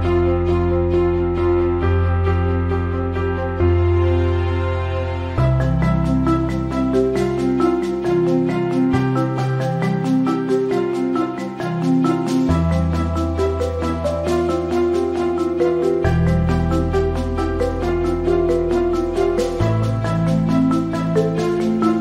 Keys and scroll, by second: 3.2 KP_8, 3.9 t, 8.2 v, 12.1 alt+shift+t, 16.2-17.1 typing, 19.2 v.